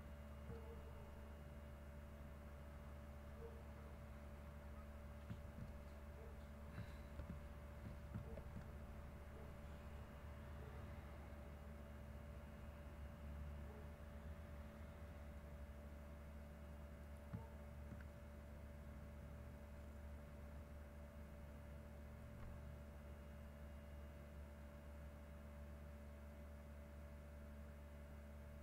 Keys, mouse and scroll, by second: 0.3 ctrl+click, 0.7 ctrl+middle click, 1.9-5.3 drag, 5.4 ctrl+x, 7.2 ctrl+z, 8.3 ctrl+z, 8.8-15.4 ctrl+drag, 16.3 click, 17.4 ctrl+middle click, 19.1 click, 19.8-20.5 drag, 21.2 click, 22.0 middle click, 23.1-24.6 drag, 25.3-26.6 drag, 26.8 click, 28.0 click.